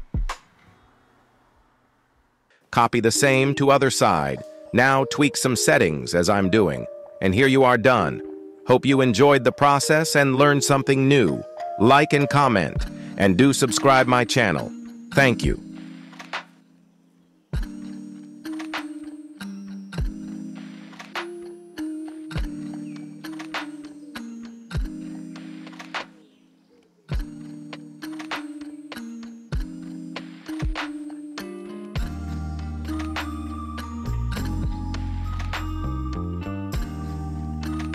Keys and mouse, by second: 0.1 shift+middle click, 0.8 KP_7, 1.9 shift+d, 2.9 r, 7.0-7.3 middle drag, 8.1 shift+middle drag, 8.7 middle click, 9.1 s, 10.5 y, 10.6 y, 11.7 g, 14.1 x, 14.1 x, 14.2 x, 14.5-14.8 middle drag, 15.2 g, 16.9 y, 18.3-21.4 typing, 23.1 y, 23.1 y, 25.4 r, 26.9 r, 29.7 r, 34.3 KP_1, 36.1 shift+d, 37.0 r.